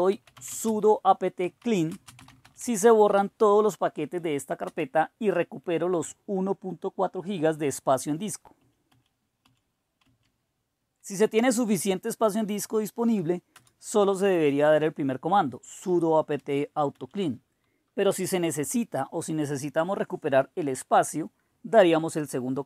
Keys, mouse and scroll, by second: 0.0-3.6 typing, 4.7 Return, 8.6 Up, 9.4 Up, 10.0 Down, 13.6 Return, 15.6 Up, 16.4 Up, 16.9 Up, 18.1 Return, 21.8 Up, 22.1-22.6 typing.